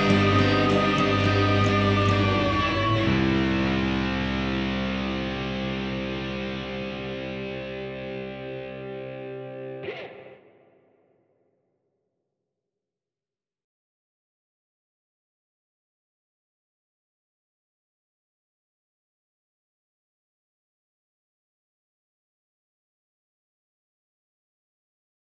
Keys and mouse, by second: 1.3-1.9 ctrl+middle drag, 2.6 shift+r, 3.3-3.8 middle drag, 4.1 shift+r, 4.8-5.3 shift+middle drag, 5.4-5.8 middle drag, 6.3 shift+r, 6.9 shift+middle drag, 7.1-8.0 middle drag, 8.6-10.4 middle drag, 10.6-11.2 shift+middle drag, 11.4-11.7 middle drag, 11.9 ctrl+middle click, 12.6 shift+middle click, 13.0-14.3 middle drag, 14.7-16.4 middle drag, 16.7-17.2 middle drag, 17.6 middle click, 18.8-19.2 shift+middle drag, 19.7-24.5 middle drag.